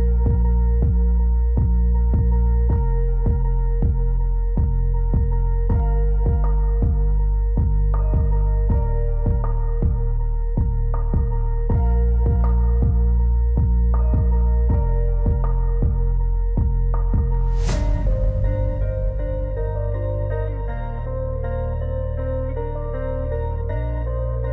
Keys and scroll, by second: 23.8 alt+w.